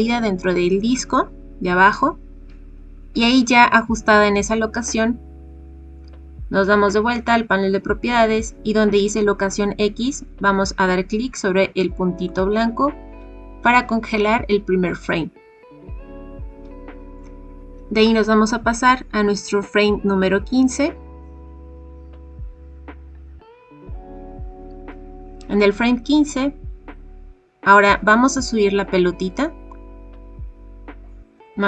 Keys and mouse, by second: 12.3 click, 18.0-22.1 drag, 26.6-31.6 drag.